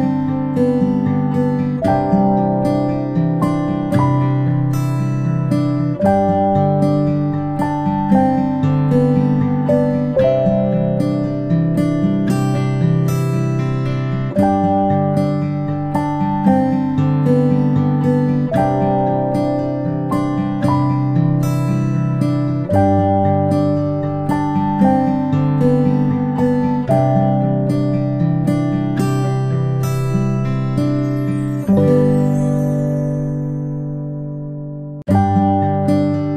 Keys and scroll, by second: 17.3 ctrl+i, 19.2 p, 21.0 a, 23.2 p, 29.4 ctrl+i, 31.7 ctrl+i, 32.7 ctrl+z, 33.0 ctrl+z, 33.7 v, 34.7 ctrl+shift+z, 36.2-36.3 typing.